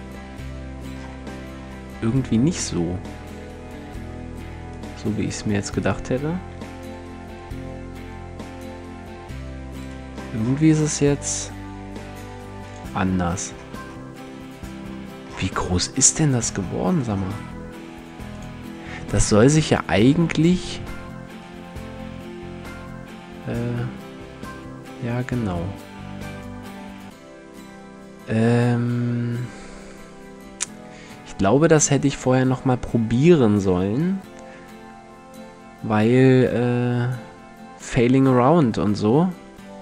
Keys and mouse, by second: 2.2 s, 4.4-5.8 drag, 5.0 s, 6.1 g, 11.0 s, 15.3 s, 16.0-17.2 drag, 17.2 s, 18.0-20.4 drag, 21.6 g.